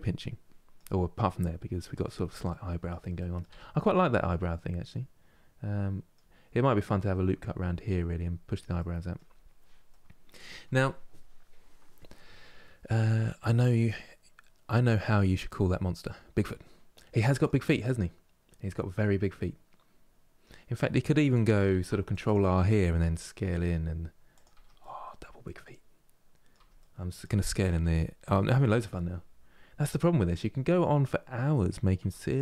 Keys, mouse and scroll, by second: 3.2 Tab, 3.5-6.5 middle drag, 8.5 middle click, 9.1 scroll down 2, 9.6-12.6 middle drag, 16.4-17.3 scroll down 1, 17.4-20.4 middle drag, 21.4 ctrl+r, 22.7 s, 24.2 Tab, 24.5-26.3 middle drag, 26.3 Tab, 26.5-27.5 middle drag, 27.5 s, 30.0-31.7 middle drag, 31.7 Tab, 32.0-32.4 middle drag.